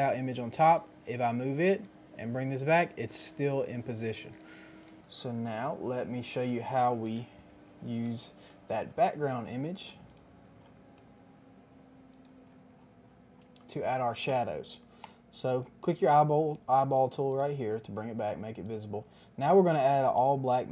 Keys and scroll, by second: 7.1 KP_1, 7.2 KP_0, 7.5 KP_0, 7.9 Return.